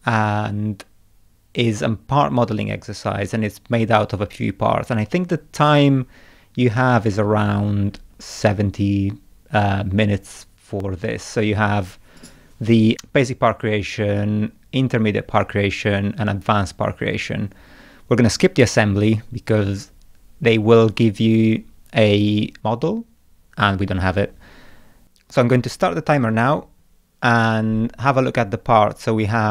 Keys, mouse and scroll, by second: 6.6-8.1 scroll up 4, 9.7 scroll up 1, 26.3 scroll down 1, 26.8 middle click.